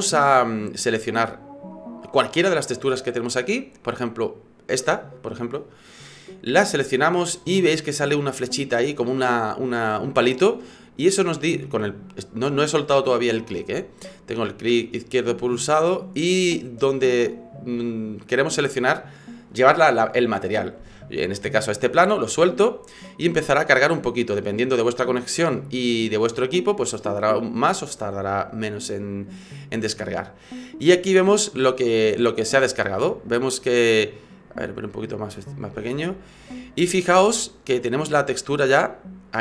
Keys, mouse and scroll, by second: 0.7 right click, 28.7 middle click, 30.1-31.7 scroll up 4, 32.7 right click, 33.6 click, 36.2 click, 37.3 click, 38.9 click.